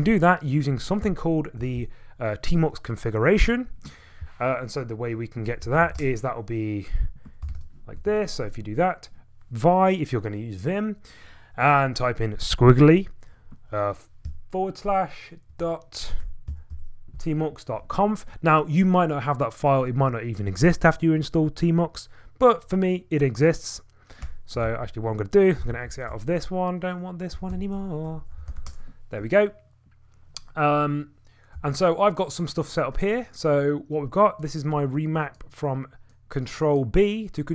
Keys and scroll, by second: 1.6 Return, 1.8 Return, 5.4-8.6 typing, 14.2 /, 15.5 ,, 16.2 BackSpace, 16.7 BackSpace, 24.2 Return, 24.6 alt+Tab, 25.3-27.1 typing.